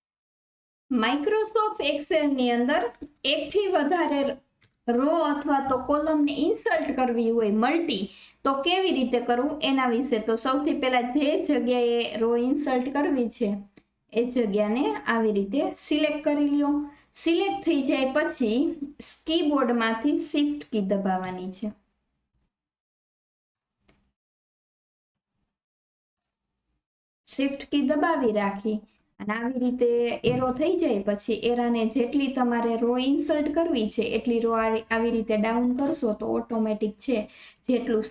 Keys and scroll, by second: 20.6 alt+KP_1.